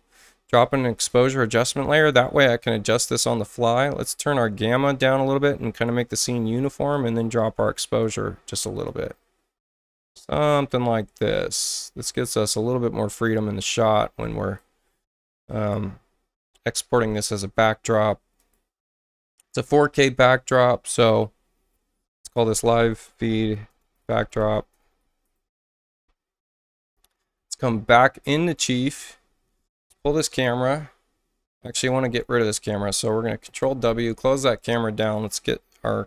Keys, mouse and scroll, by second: 0.9 click, 1.9 click, 4.0-5.8 drag, 6.9-8.0 drag, 8.8-10.1 drag, 11.3-13.2 drag, 16.7 ctrl+alt+shift+w, 18.4 click, 22.0-25.5 typing, 26.6 alt+Tab, 27.3 alt+Tab, 28.4 alt+click, 29.9 click, 30.1 click, 32.5 click, 33.5 ctrl+w, 35.0 click, 35.8 click.